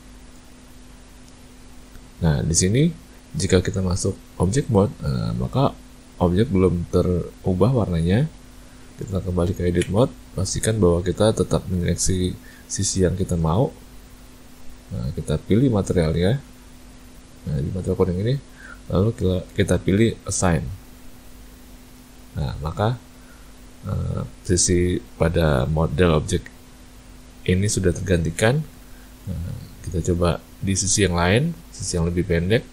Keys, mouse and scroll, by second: 1.7 Tab, 9.8 Tab, 11.8 click, 12.6 click, 16.1 click, 20.4 click, 22.2 Tab, 29.1 Tab, 31.6 click.